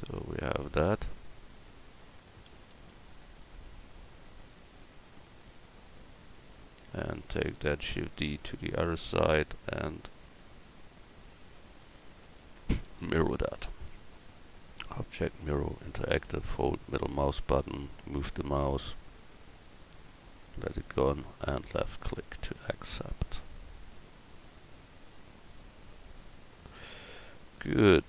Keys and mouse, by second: 2.5 s, 7.8 shift+d, 21.6 middle drag, 22.0 middle click.